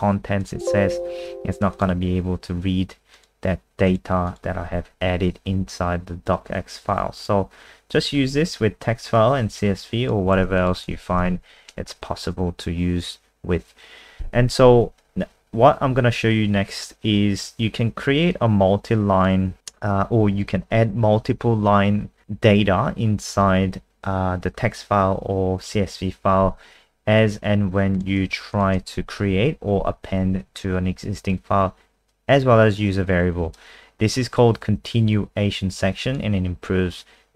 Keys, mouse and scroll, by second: 0.4 click, 4.6 alt+F4, 7.2 click, 7.6-8.0 scroll down 3, 9.1 click, 10.3 ctrl+c, 10.6 click, 10.8 ctrl+a, 11.1 ctrl+v, 18.3 click, 28.5 shift+click, 29.3 Delete, 32.1 click.